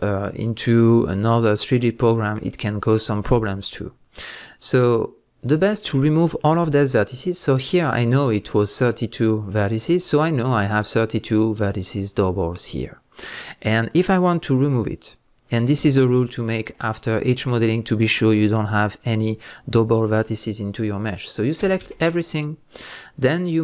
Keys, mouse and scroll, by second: 9.3 alt+click, 14.8 scroll down 1, 16.3-23.6 shift+middle drag.